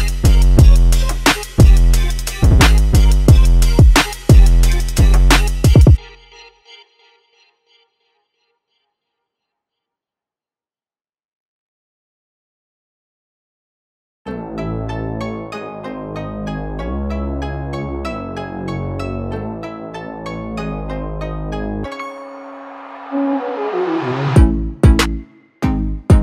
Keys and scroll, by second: 3.1 typing, 7.3 typing, 11.0 typing, 14.9 5, 19.0 5, 19.4 5, 21.8 5.